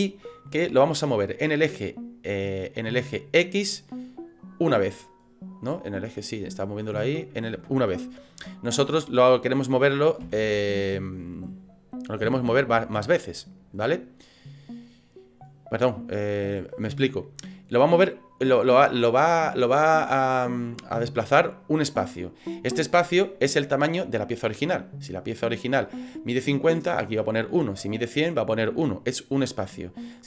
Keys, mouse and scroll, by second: 5.9 middle click, 10.3 ctrl+z, 12.2 KP_3, 14.3 click.